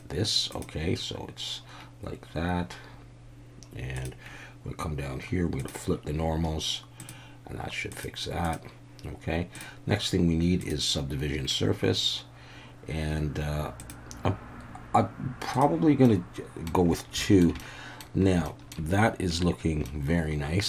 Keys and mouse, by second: 4.0 drag, 5.6 click, 7.0-8.7 drag, 10.6-13.9 drag, 16.0-16.7 middle drag, 17.2 shift+middle drag, 17.6-18.0 middle drag, 18.4 shift+middle drag, 19.8-20.6 middle drag.